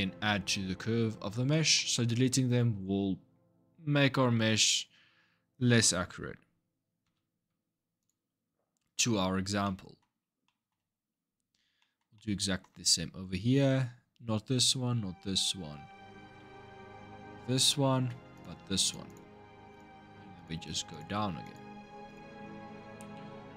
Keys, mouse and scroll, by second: 1.3-4.4 shift+middle drag, 6.8 x, 8.4-9.4 scroll down 4, 9.4 middle click, 9.9-10.2 scroll down 1, 10.2 middle click, 10.7-11.6 scroll up 3, 11.6-14.9 middle drag, 16.2-18.1 middle drag, 18.1 click, 18.6 alt+shift+click, 18.9 alt+shift+click, 19.5 alt+shift+click, 20.1 alt+shift+click, 20.7 alt+shift+click, 21.2 alt+shift+click, 21.9 alt+shift+click, 22.8-23.5 middle drag.